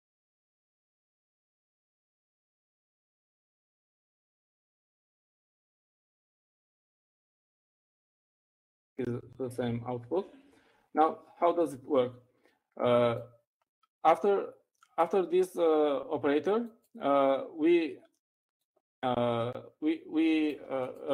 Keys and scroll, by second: 1.4-2.4 typing, 3.5-7.7 typing, 8.9 Up, 9.6 Up, 10.5-11.2 typing.